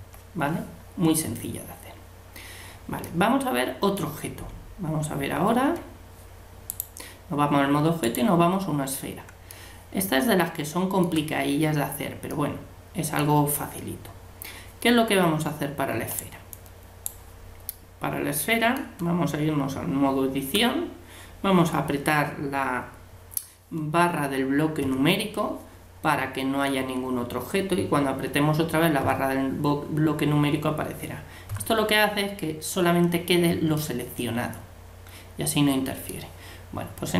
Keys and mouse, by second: 3.1-4.8 middle drag, 5.2 Tab, 8.0-9.7 right drag, 9.5-16.2 middle drag, 16.2 click, 16.4 right click, 16.5-17.9 drag, 17.5-19.0 middle drag, 19.0 Tab, 24.8 KP_Divide, 29.0 KP_Divide, 29.7 middle click, 29.9 middle click, 31.5 KP_Divide, 35.2 middle click, 36.5 middle click.